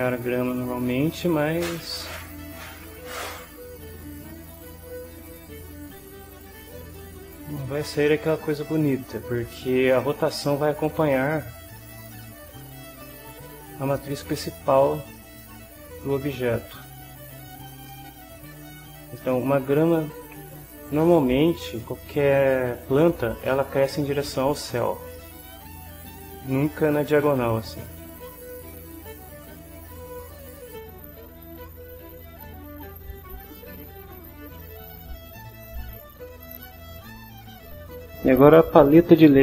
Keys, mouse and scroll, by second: 2.9-6.9 middle drag, 7.0 middle click, 8.1-9.6 drag, 9.7 shift+middle click, 10.0-11.0 shift+middle drag, 12.2-17.1 middle drag, 17.9-19.0 middle drag, 19.1-20.5 middle drag, 25.1 middle click, 27.7-30.1 middle drag, 30.7 shift+middle click, 30.9 shift+scroll up 2, 31.0 shift+middle click, 31.4 scroll up 2, 31.6 scroll down 3, 31.8 ctrl+scroll up 2, 32.0 ctrl+scroll down 1, 34.2 right click.